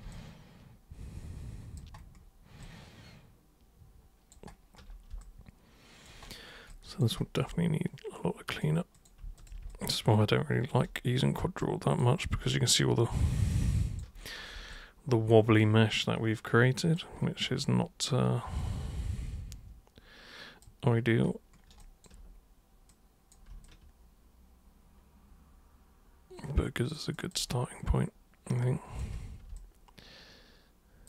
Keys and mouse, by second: 0.1-1.7 alt+drag, 2.6-4.3 alt+super+drag, 5.2 alt+super+click, 6.7 alt+super+click, 8.5 super+click, 9.0 super+click, 9.4 shift+super+click, 9.7 alt+super+click, 11.6 super+click, 12.4-14.0 alt+super+drag, 14.7-17.0 drag, 18.6-20.6 alt+super+drag, 21.8 alt+super+click, 22.9 super+click, 23.6-26.9 shift+super+drag, 27.1 shift+click, 27.5-29.0 shift+drag, 29.6-31.0 alt+super+drag.